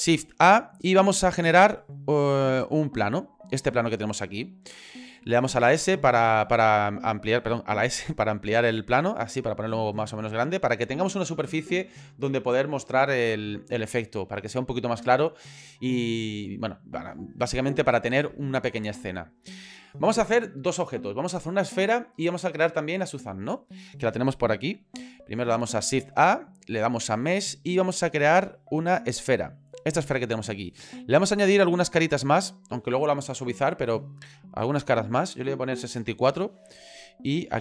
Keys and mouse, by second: 0.2 shift+a, 1.4 shift+a, 5.4 a, 6.4 a, 7.8 s, 10.0 middle click, 10.7 shift+middle click, 25.9 shift+a, 31.7 click, 34.7-37.3 drag.